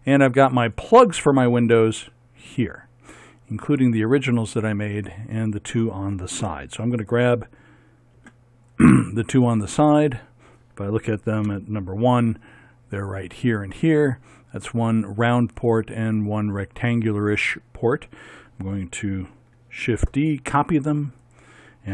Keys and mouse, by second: 0.7-2.2 drag, 2.2 middle click, 2.4 click, 2.7 middle click, 8.2 b, 9.1-11.5 drag, 11.5 KP_1, 19.9 shift+d.